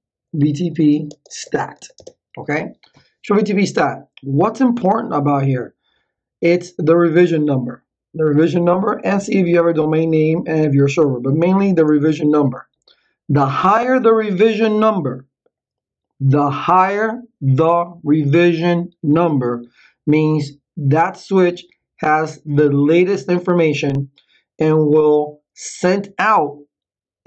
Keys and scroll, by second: 0.0-2.3 typing.